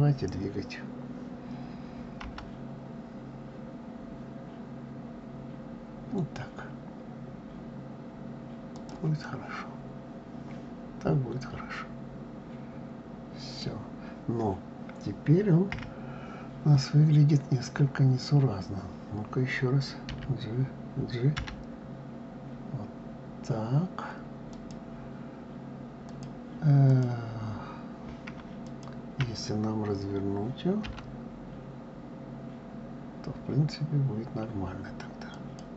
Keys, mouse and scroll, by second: 9.0-12.0 middle drag, 15.5 KP_1, 19.9 d, 25.9 click, 26.6 click, 28.4 shift+click, 30.6 r.